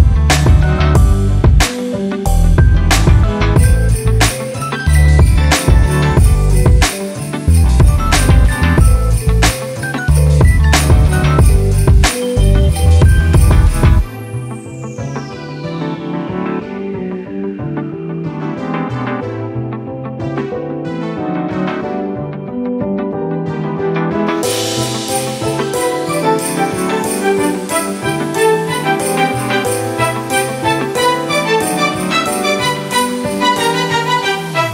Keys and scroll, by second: 3.7 f, 6.9-8.1 typing.